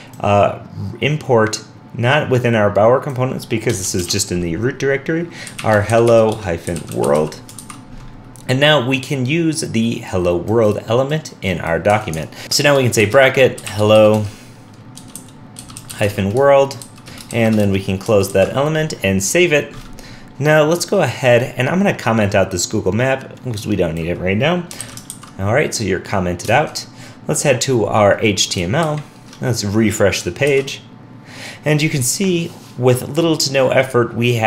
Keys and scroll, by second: 7.6 super+s, 18.3 super+s, 24.8 super+/, 25.1 super+s, 26.6 super+Tab, 28.8 super+Tab, 28.8 alt+super+Right, 30.5 super+r.